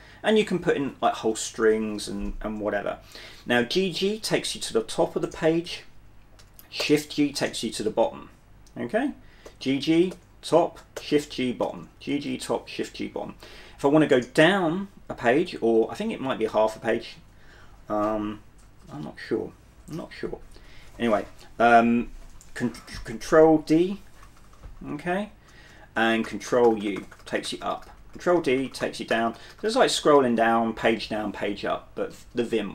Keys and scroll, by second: 2.7 g, 2.9 g, 6.9 shift+g, 9.7-11.9 typing, 16.7 shift+d, 18.9 shift+d, 20.1-21.9 typing, 23.1 ctrl+d, 23.1 typing, 23.9 ctrl+d, 24.4 ctrl+d, 26.3 ctrl+d, 26.6 ctrl+u, 26.9 ctrl+u, 28.3 ctrl+u, 28.5 ctrl+d, 29.2 ctrl+d, 29.4 ctrl+d, 29.5 ctrl+u.